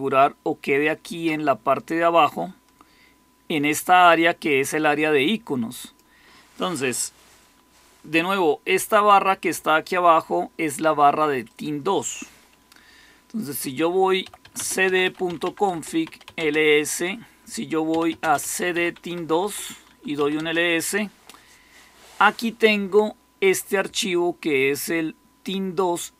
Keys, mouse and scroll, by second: 13.9-16.5 typing, 17.5-20.6 typing.